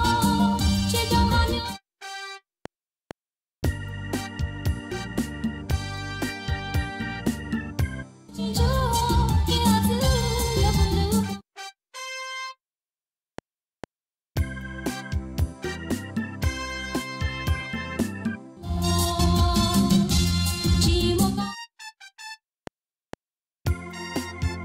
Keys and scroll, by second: 1.4 space, 3.5 F7, 8.0 space, 11.1 space, 13.2 F7, 18.3 space, 21.2 space, 22.5 F7.